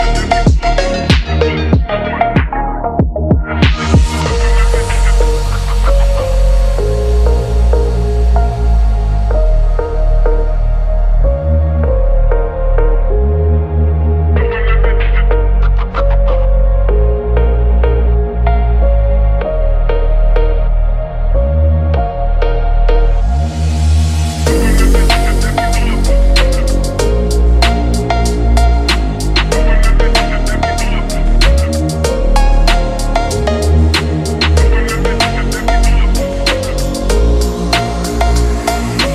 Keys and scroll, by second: 9.5 ctrl+z, 34.2 ctrl+0.